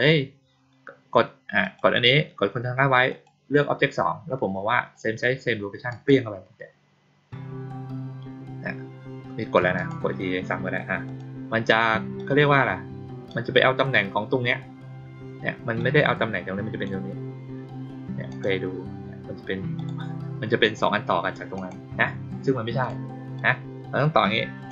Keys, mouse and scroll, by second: 1.5 click, 3.0 ctrl+click, 5.8 click, 9.7 click, 11.0 click, 12.1 click, 15.7-16.8 drag, 18.2 click, 19.7 click, 21.5 click, 22.7 click, 23.3-24.6 drag.